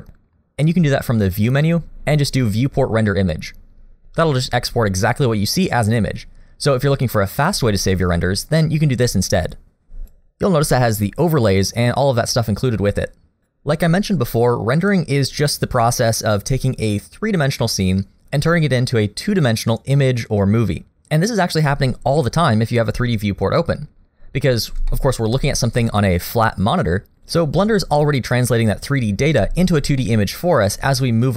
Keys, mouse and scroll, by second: 1.2 click, 22.2 middle click, 24.9 shift+middle click, 25.7-27.1 scroll up 1, 30.0 middle click.